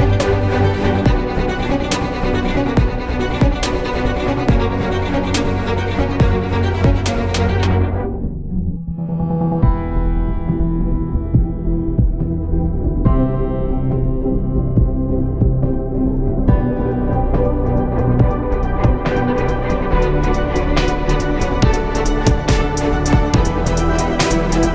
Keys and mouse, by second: 0.0 z, 1.1 s, 3.1 z, 3.8 KP_7, 5.3 Tab, 5.5 a, 6.3 shift+d, 8.4-9.4 drag, 9.4 s, 12.3 z, 13.5 ctrl+Tab, 14.0 z, 16.3 z, 17.2 Tab, 17.6 Tab, 18.2 ctrl+Tab, 18.7 click, 18.8 z, 19.2 c, 20.2 z, 21.1 KP_7, 21.9 z, 22.8 shift+d.